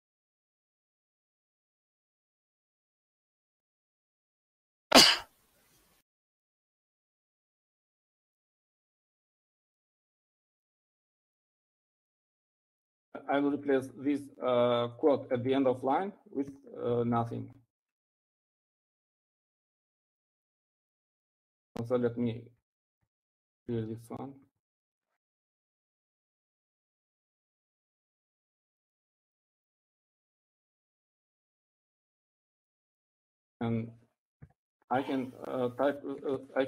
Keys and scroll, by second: 1.5-2.4 typing, 3.7-4.4 typing, 6.2-13.3 typing, 15.3 typing, 17.0-18.3 typing, 21.9 Up, 22.4 Up, 23.3 Up, 23.8 Up, 24.3 Down, 24.4 Right, 25.8 Left, 27.4 d, 28.1 shift+4, 30.8-32.9 typing, 34.3 Left, 34.4 Left, 35.1 Left, 35.7-36.6 typing.